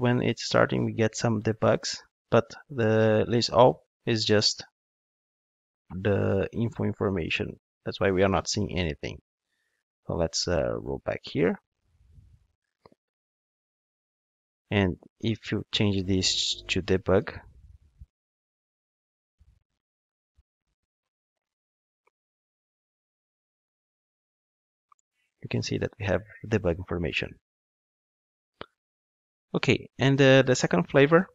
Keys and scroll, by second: 10.0 super+z, 28.2 super+z.